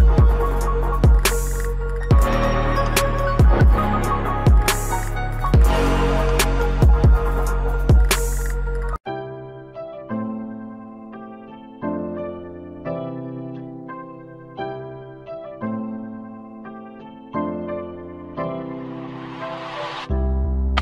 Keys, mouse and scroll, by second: 0.3 click, 0.3 typing, 3.6-4.9 drag, 3.6 typing.